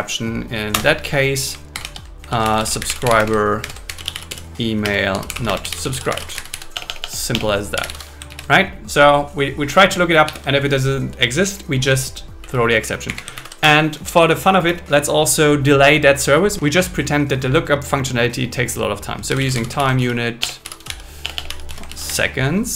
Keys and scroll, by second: 0.7 Return, 1.5-3.6 typing, 4.8 space, 6.7 BackSpace, 8.3 super+Left, 10.2 super+Left, 12.4 Right, 13.0 Up, 13.4 super+Right, 13.6 Return, 19.3-21.9 typing.